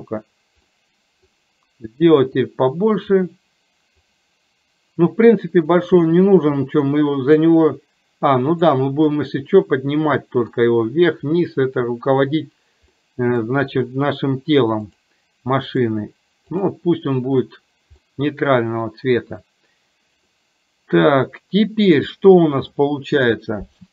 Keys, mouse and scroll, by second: 0.8 middle click, 2.3-3.9 drag, 5.9-9.2 drag, 9.2-10.6 middle drag, 13.2 middle click, 14.9 click, 15.8-16.8 drag, 17.4 drag, 18.2 middle click, 20.4-21.9 middle drag, 22.8 middle click.